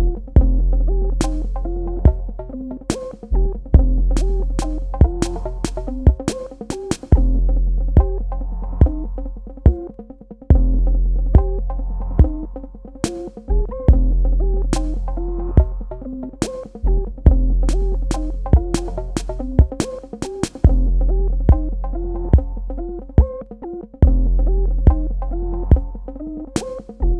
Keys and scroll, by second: 1.5 ctrl+Num_Lock, 4.3 space, 19.2 space.